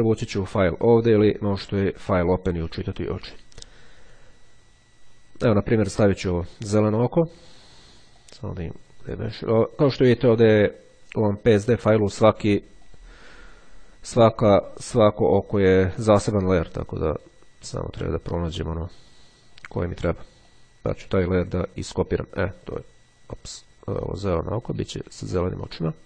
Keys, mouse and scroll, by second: 6.3 click, 8.3 click, 13.0 click, 16.5 click, 17.3 click, 18.4-19.6 drag, 19.6-20.2 scroll up 1, 20.5 click, 22.3 click, 23.3-24.7 drag, 25.8 click.